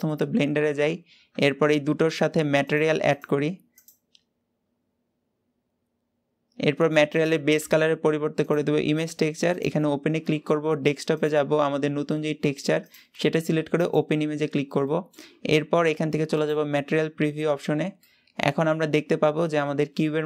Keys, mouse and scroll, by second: 1.2 Tab, 2.6-13.9 drag, 14.7-17.0 middle drag, 17.0 click, 17.9-20.2 middle drag.